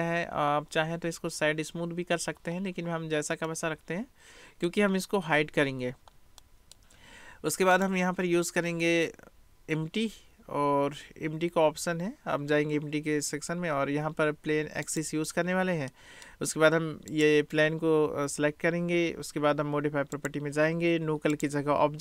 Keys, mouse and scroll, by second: 0.8 middle click, 3.5-4.7 middle drag, 6.4 middle click, 7.8-15.1 drag, 15.9-16.3 drag, 17.1 click, 20.3 click, 21.3-22.0 drag.